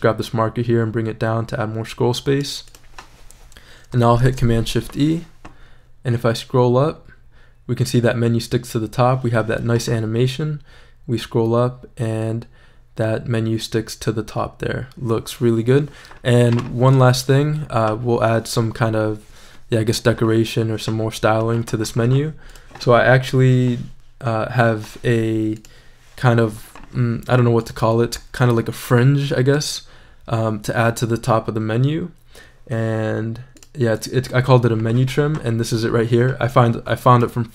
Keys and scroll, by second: 4.2 shift+super+e.